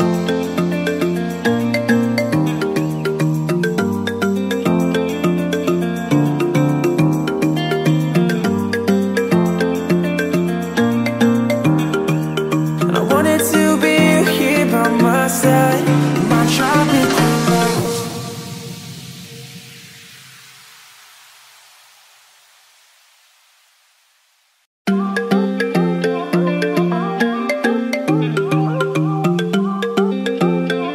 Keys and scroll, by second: 3.0 Return, 21.4 ctrl+t, 27.0 Return, 28.1 space.